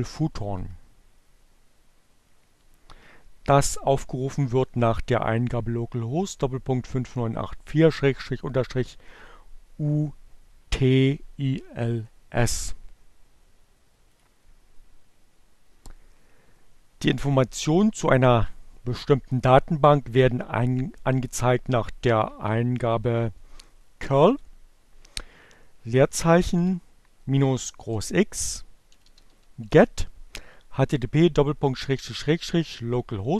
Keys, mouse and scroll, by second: 14.1 click, 20.5 Up, 22.5 Left, 25.2 -, 26.7-29.6 typing, 32.9 Right.